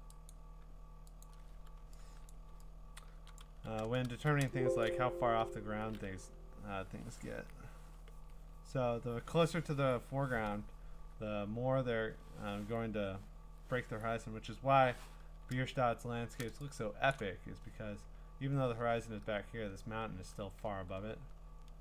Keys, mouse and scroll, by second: 0.3 click, 1.2 click, 2.2-3.4 scroll, 2.3 click, 3.4 click, 3.5 b, 4.4 scroll, 4.5-7.9 drag, 15.5 click, 15.5-16.3 scroll, 17.1 click, 17.2 click, 20.7-21.4 scroll, 21.4 scroll down 10.